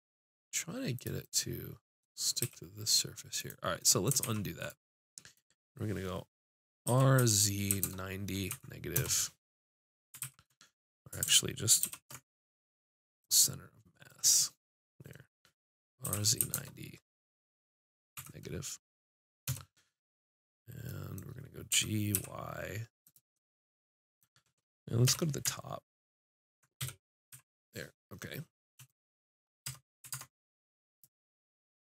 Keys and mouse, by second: 1.0-2.9 drag, 2.4 g, 4.2 ctrl+z, 6.9 r, 10.2 ctrl+z, 11.8 ctrl+alt+shift+c, 16.0 r, 21.7 g, 23.4-24.6 drag, 24.6 middle click, 25.1 KP_7, 26.8 KP_5, 27.3 z, 29.7 Tab, 30.3 ctrl+Tab.